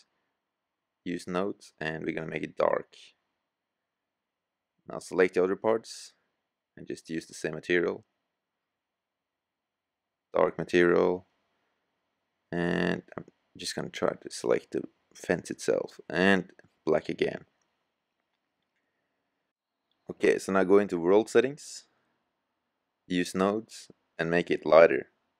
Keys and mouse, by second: 22.0-22.7 drag.